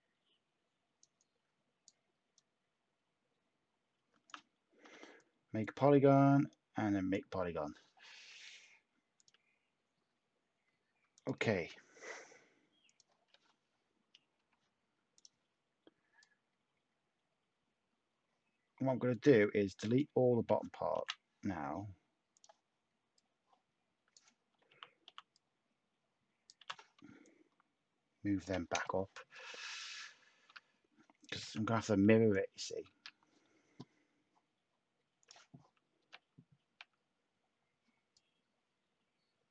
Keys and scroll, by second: 4.7 p, 7.3 p, 8.3 Tab, 11.0 Tab, 14.3 /, 20.9 Delete, 24.6-25.0 typing, 26.6 t, 28.7 space, 30.3 a, 31.4 /, 32.8 a, 35.9 /.